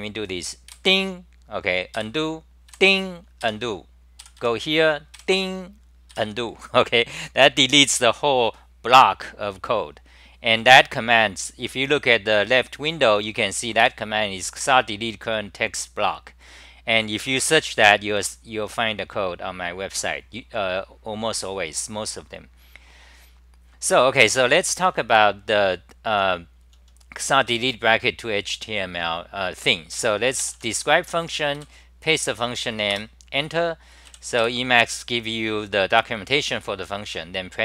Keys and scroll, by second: 0.7 i, 2.0-6.1 typing, 13.1 c, 13.8 i, 18.2 f, 24.9 d, 25.1 d, 26.3 t, 27.2 1, 27.5 j, 31.1 End, 31.6 k, 33.1 Return, 34.1 w, 34.4 3.